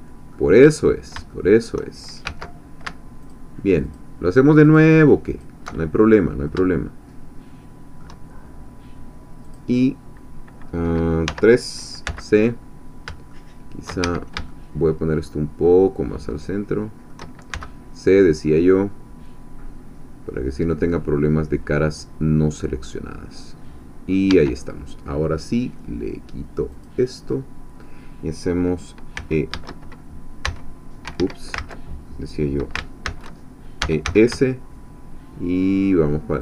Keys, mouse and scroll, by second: 0.6-1.3 scroll up 3, 1.3 shift+click, 2.2 shift+1, 3.2 alt+shift+click, 4.7 alt+shift+click, 6.5-8.2 shift+middle drag, 9.4 click, 11.3 3, 12.0 c, 13.4 shift+click, 14.0 shift+Escape, 14.5-17.2 shift+drag, 17.5 shift+c, 18.4-24.3 middle drag, 24.3 Escape, 26.7 click, 27.3-29.1 middle drag, 29.1 s, 30.9 s, 31.1 Escape, 31.6 ctrl+z, 33.1 ctrl+shift+z, 33.6-34.5 typing, 36.3 shift+click.